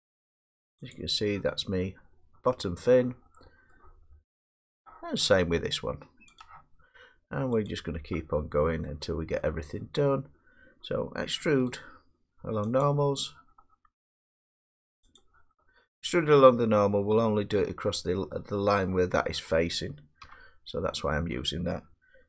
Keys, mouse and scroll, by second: 0.9 click, 1.4 scroll, 2.8-3.5 middle click, 3.7 middle click, 4.1 middle click, 4.2 middle click, 6.4 click, 8.0 click, 8.4 scroll down 2, 8.9 middle click, 9.8 middle click, 11.7 right click, 15.2 click, 17.5 middle click, 18.9 middle click, 20.2 1.